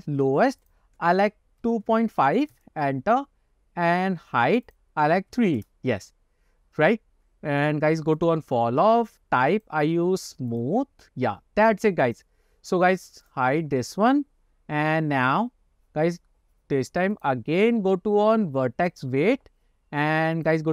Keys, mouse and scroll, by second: 0.8-3.0 drag, 4.8-5.9 drag, 8.3 click, 9.6-11.0 drag, 12.2 click, 13.4 click, 14.8-15.2 scroll down 1, 15.3-16.2 scroll up 2, 17.2-19.2 drag, 20.5 click.